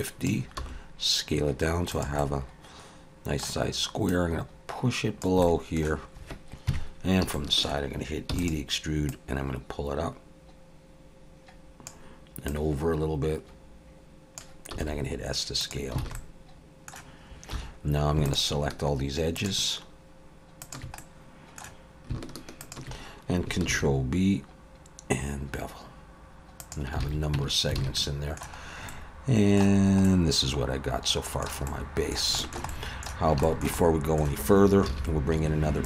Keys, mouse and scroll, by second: 0.0 click, 0.6 s, 2.2 middle click, 4.1 click, 5.4 middle click, 6.7 KP_3, 7.3 shift+middle click, 8.3 e, 9.1 click, 12.5 click, 14.7 s, 16.0 alt+a, 16.2 middle click, 17.5 2, 18.3 alt+shift+click, 20.6 alt+shift+click, 21.0 middle click, 22.6 alt+shift+click, 23.7 ctrl+b, 27.0 alt+a, 27.3 Tab, 27.8 alt+a, 28.0 middle click, 28.6-29.8 scroll down 3, 28.9 middle click, 29.8-30.9 scroll up 3, 30.0 middle click, 31.7 middle click, 32.4 shift+middle click, 32.7 middle click, 33.4 shift+middle click, 33.8 middle click, 34.9 shift+a.